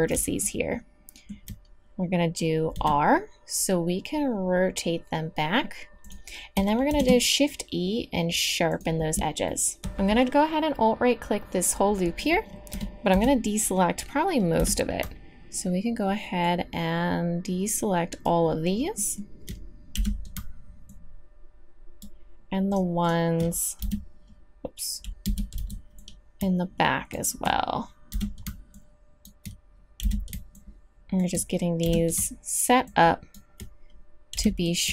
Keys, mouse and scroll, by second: 2.7 r, 6.9 shift+e, 11.8 middle click, 12.7 KP_3, 13.1 z, 14.6 b, 19.9 b, 23.8 n, 25.2 n, 25.5 b, 28.1 b, 30.0 b, 31.8 b, 34.3 b.